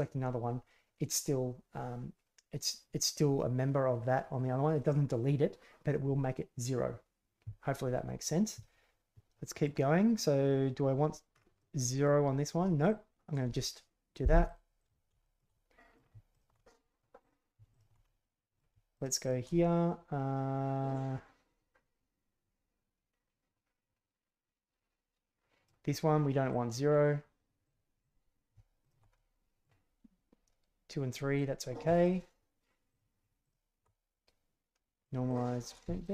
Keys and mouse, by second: 9.2-9.6 middle drag, 11.6 middle click, 12.9 click, 14.8 drag, 15.2 shift+click, 15.5-15.9 drag, 16.3 alt+right click, 16.6 middle click, 17.2 right click, 17.7 alt+right click, 18.0 middle click, 18.9 shift+middle click, 19.2 shift+middle click, 21.8-25.6 middle drag, 26.5 click, 27.6 click, 28.0 click, 28.8 alt+click, 29.1-29.6 middle drag, 31.1 drag, 32.0 alt+click, 32.9 alt+click, 33.4 alt+click, 35.0 click, 35.3 click, 36.0 alt+click.